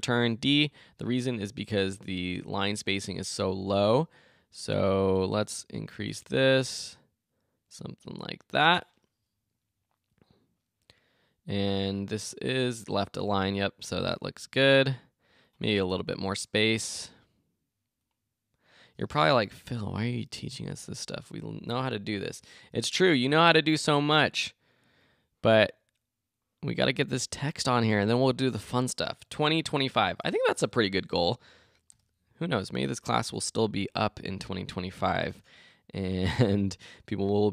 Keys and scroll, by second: 29.4 Return, 30.2 BackSpace, 30.5 Return, 33.0 Left, 33.3 Return.